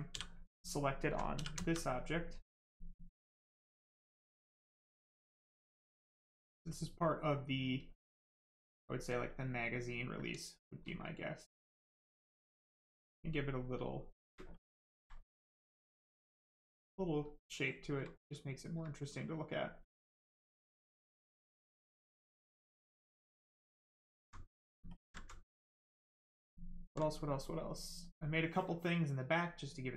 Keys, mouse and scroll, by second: 0.1 right click, 0.6 alt+right click, 1.6 alt+right click, 2.4 right click, 3.6 click, 4.6 right click, 5.1 click, 5.6 right click, 6.6 click, 9.3 click, 10.0 right click, 11.6 ctrl+click, 13.7 ctrl+space, 14.5 ctrl+click, 15.1 click, 16.3 right click, 17.7 ctrl+click, 18.1 right click, 20.0 shift+click, 20.9 right click, 23.5 shift+click, 24.1 alt+right click, 24.9 ctrl+click, 25.2 alt+right click, 25.5 alt+right click, 25.6 alt+right click, 27.9 right click.